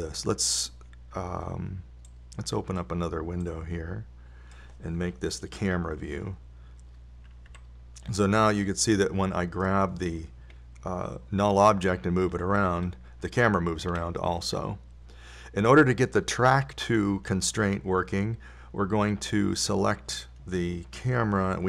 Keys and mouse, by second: 3.4-5.2 drag, 5.3 click, 6.8 KP_0, 8.9 a, 13.6 g.